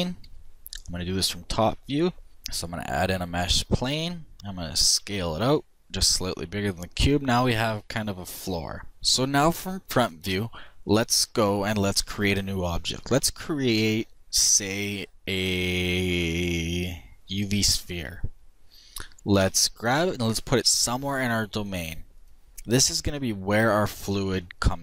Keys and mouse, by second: 0.9 middle click, 1.3 click, 1.4-3.3 middle drag, 2.3 shift+a, 4.4 s, 7.2-8.9 middle drag, 9.8 KP_1, 11.9 shift+a, 18.4 g.